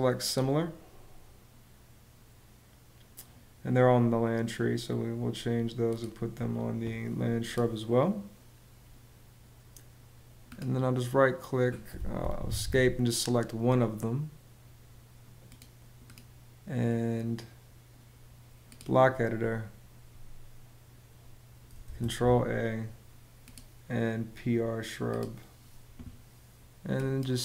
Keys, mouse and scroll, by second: 11.8 Escape, 13.2 Escape, 21.5 super+a.